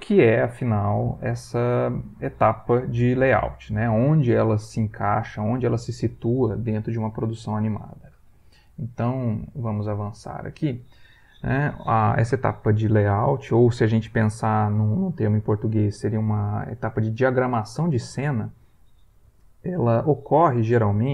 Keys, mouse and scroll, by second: 10.1 click.